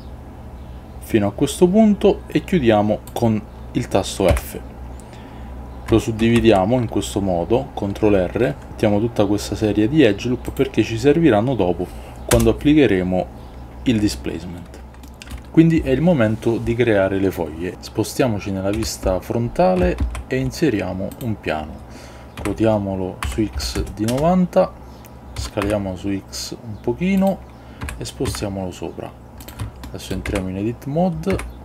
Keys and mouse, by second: 4.5 f, 6.3 ctrl+r, 12.4 Return, 14.5 middle click, 18.8 KP_1, 20.1 shift+a, 22.5 r, 23.3 x, 23.7 KP_9, 24.2 Return, 25.5 s, 25.7 x, 27.3 click, 28.0 g, 28.4 z, 29.5 click, 29.9 shift+middle click, 30.4 Tab, 31.5 Tab.